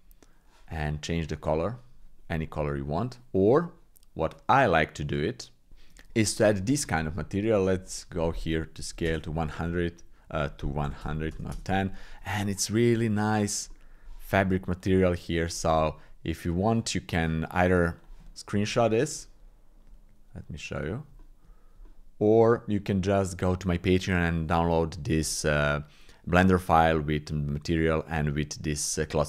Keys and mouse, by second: 1.2 click, 4.4 click, 4.8 middle click, 5.7 shift+click, 7.0 shift+click, 8.0-9.0 drag, 10.4-11.5 drag, 11.3 KP_0, 12.4 click, 13.7 click, 14.8 click, 18.0 click, 21.2 shift+click, 21.9 shift+click.